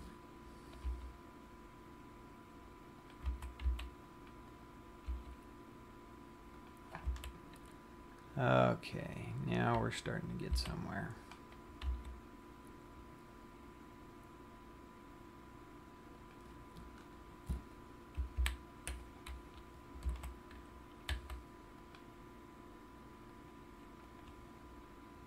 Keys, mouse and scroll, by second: 1.4 right click, 1.5 g, 3.8 click, 3.8 a, 4.2 c, 5.2 right click, 5.6 g, 7.1 click, 7.6 a, 11.0 c, 12.5 g, 16.7 click, 17.7-18.9 scroll up 8, 18.9 ctrl+l, 20.5 a, 21.7 c, 24.7 right click, 25.0 scroll down 1.